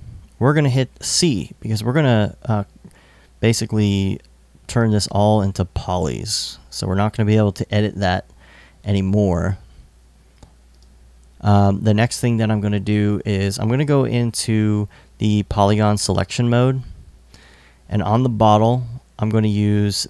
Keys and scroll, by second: 1.4 c.